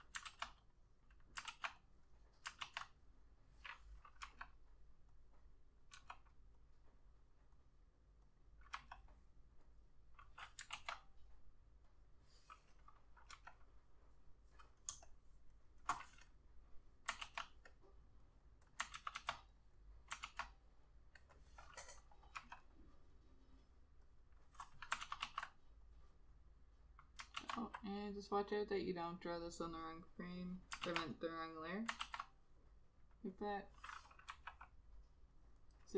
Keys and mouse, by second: 0.4 ctrl+z, 1.6 ctrl+z, 2.8 ctrl+z, 4.4 ], 6.1 ], 8.9 ], 10.9 ctrl+z, 13.5 ], 15.0 space, 17.4 ctrl+z, 19.1 ctrl+z, 19.3 ctrl+z, 20.4 ctrl+z, 22.5 ], 25.2 ctrl+z, 25.4 ctrl+z, 27.5 ctrl+z, 28.9 double click, 31.0 ctrl+z, 32.1 ctrl+z, 34.7 ].